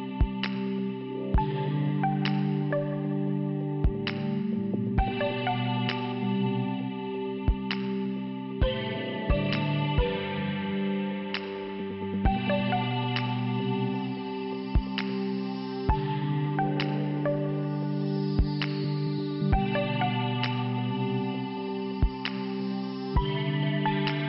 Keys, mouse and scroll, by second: 2.1 scroll up 1, 2.5 scroll down 2, 3.4 click, 5.7 click, 7.2 click, 8.2 click, 10.7 click, 13.3 click, 17.6 click, 19.4 click, 20.3 click, 21.9 click, 22.6 click, 23.9 click, 24.0 click.